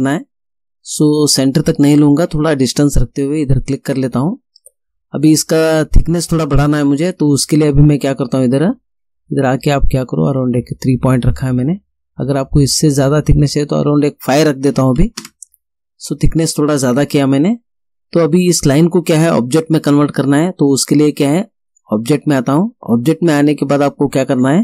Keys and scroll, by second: 14.7 5, 15.2 Return.